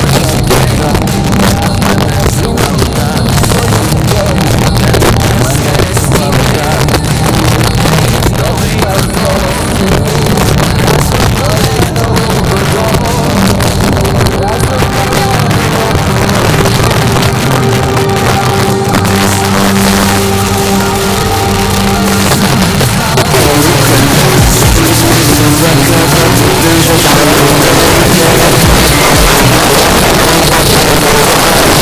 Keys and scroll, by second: 29.5 Page_Down.